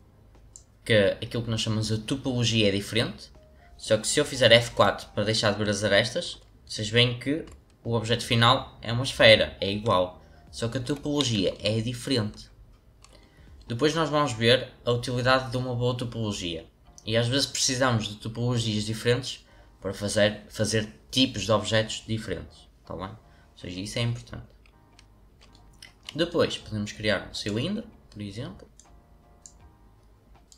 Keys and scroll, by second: 4.7 F4, 10.8 F4.